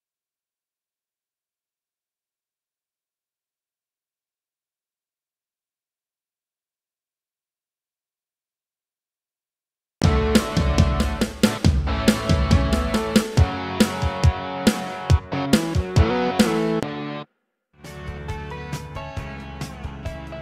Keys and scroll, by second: 9.8 space, 17.2 space.